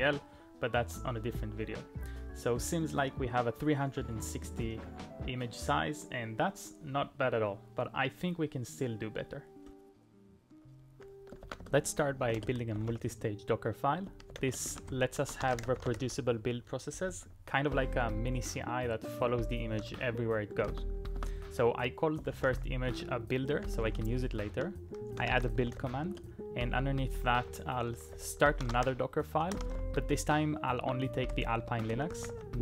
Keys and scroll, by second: 11.5 ctrl+a, 11.8-18.4 typing, 20.6 typing, 21.2 Return, 22.1-30.3 typing, 30.8 ctrl+o, 31.3-32.6 typing, 31.8 Return.